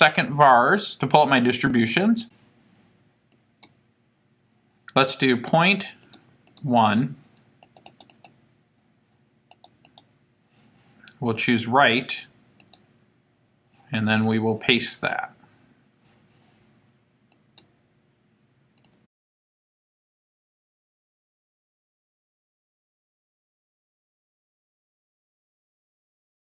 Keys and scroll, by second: 1.4 Down, 3.3 Return, 5.4 ., 6.1 1, 6.5 0, 7.6 Down, 9.5 Right, 11.4 Return, 14.2 Down, 17.3 Return.